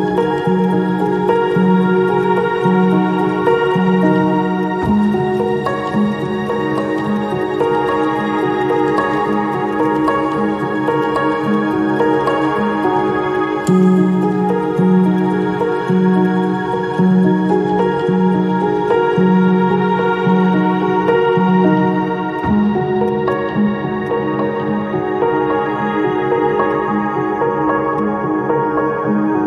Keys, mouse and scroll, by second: 2.1 ctrl+z, 5.9 shift+click, 6.6 shift+click, 6.7 shift+click, 8.2 shift+click, 11.9 shift+click, 16.9 ctrl+click, 18.8 ctrl+alt+click, 21.0 ctrl+click, 22.4 ctrl+click, 22.9 ctrl+z, 22.9 click, 23.1 right click, 24.0 ctrl+click, 27.9 ctrl+alt+click.